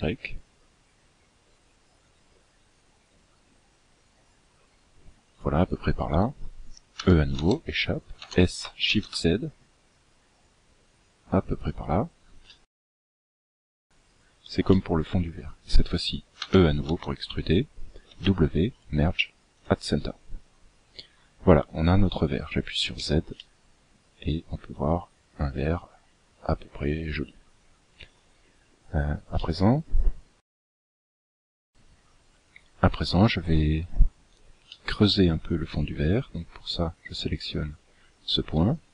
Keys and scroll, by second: 6.4 e, 15.7 e, 18.0 w, 22.1 z.